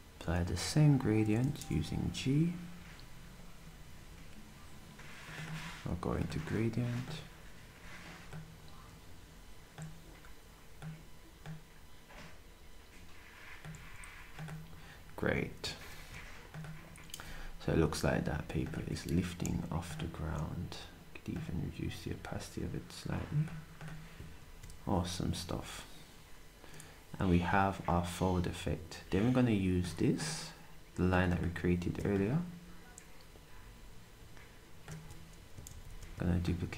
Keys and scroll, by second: 1.6 g, 13.7 s, 34.9 s, 35.7 d.